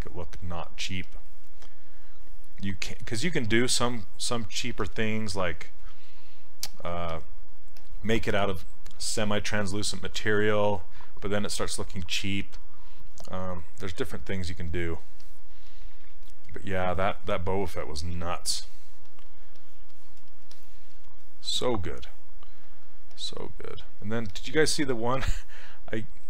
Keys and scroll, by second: 22.7 s.